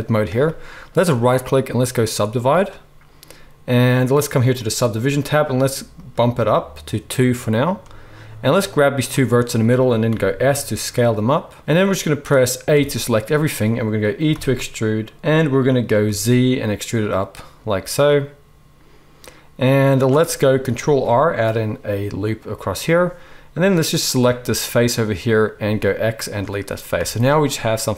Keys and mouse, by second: 1.1-4.5 right drag, 4.6-11.6 drag, 4.6-15.1 right drag, 6.0-11.6 middle drag, 10.0 s, 12.7 a, 14.3 e, 15.1-23.9 drag, 20.7 ctrl+r, 23.9 middle click, 24.5-27.9 right drag, 25.5 x, 26.9 z.